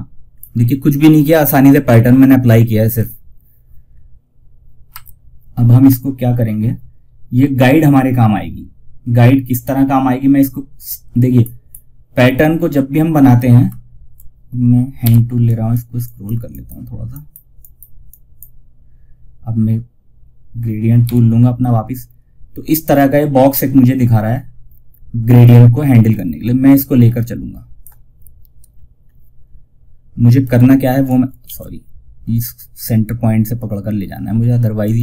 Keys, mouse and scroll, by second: 1.5 scroll down 1, 4.2 F4, 10.7 scroll up 1, 10.7 typing, 14.3 h, 14.7 click, 15.8 click, 20.4 g, 25.4-28.0 drag, 28.0 scroll down 1, 29.7 click, 30.5 ctrl+click, 30.7 ctrl+z, 34.1-35.0 drag.